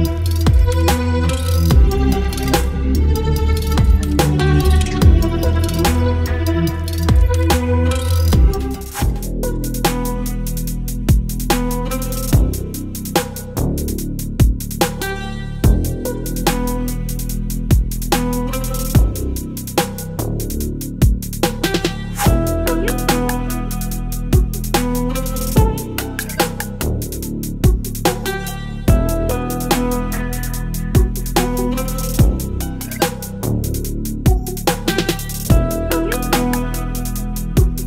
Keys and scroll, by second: 1.9 ctrl+BackSpace, 3.8 Delete, 5.5 Delete, 7.2 Delete, 11.2 ctrl+z, 12.0 ctrl+BackSpace, 12.2 ctrl+d, 12.4 v, 14.0 space, 14.3 l, 16.0 ctrl+z, 21.7 ctrl+BackSpace, 22.0 ctrl+d, 25.7 ctrl+BackSpace, 30.0 ctrl+BackSpace, 36.4 Return, 36.7 l, 37.7 ctrl+BackSpace.